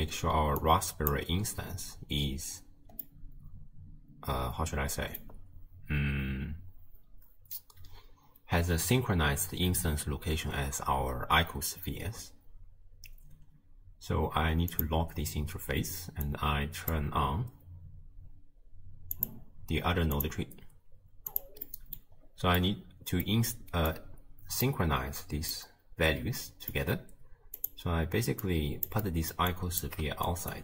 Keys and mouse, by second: 0.6 click, 3.1-5.2 drag, 14.7 click, 16.4 click, 19.2 click, 20.2 click, 21.3 drag, 21.7 middle click, 22.7 middle click, 23.9-24.7 drag, 25.6-26.9 middle drag, 27.6 click, 28.5 click, 29.2 click, 29.6 click.